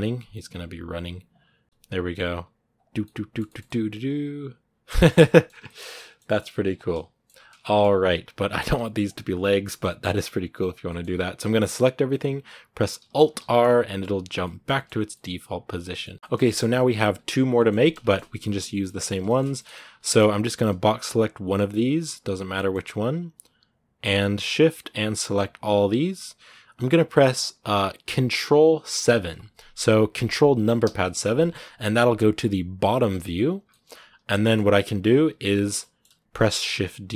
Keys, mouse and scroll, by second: 0.7 right click, 0.9 r, 1.6 shift+middle click, 2.0 right click, 2.2 r, 2.7 scroll down 2, 2.8-5.6 middle drag, 5.6 scroll up 1, 5.6-7.3 middle drag, 7.3 scroll down 1, 7.4 middle click, 7.7-8.0 scroll up 2, 8.0 a, 9.5-9.9 scroll up 1, 10.4 b, 10.6-13.1 middle drag, 13.1 alt+r, 13.4 scroll down 2, 13.4 middle click, 14.1 a, 14.2 middle click, 14.8 scroll down 1, 14.9-16.0 middle drag, 16.0 scroll up 2, 16.1-18.1 shift+middle drag, 18.1 scroll down 2, 18.2-21.9 middle drag, 21.9 b, 22.3 shift+middle click, 22.5 scroll up 2, 23.5-24.7 shift+right drag, 24.9 scroll down 1, 28.8 ctrl+KP_7, 30.6 ctrl+KP_7, 33.5 shift+middle click, 33.6-34.2 scroll up 3, 34.2-36.5 shift+middle drag, 36.5 shift+d.